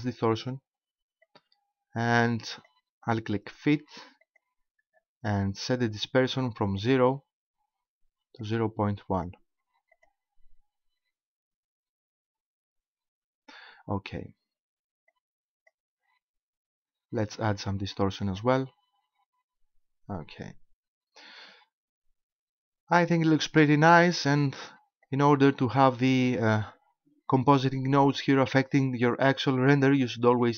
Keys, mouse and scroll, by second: 1.3 click, 4.3 click, 6.8 click, 8.5 click, 9.9 click, 15.1 click, 18.3 click, 20.2 scroll down 1, 25.1 click, 30.4 click.